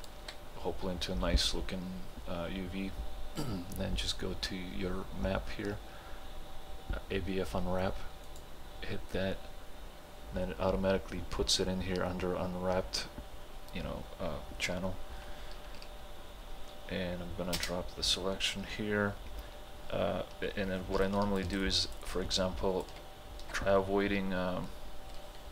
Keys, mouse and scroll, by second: 8.3 click, 17.6 space, 21.0 space, 21.1 ctrl+alt+click, 22.2-25.5 ctrl+alt+drag.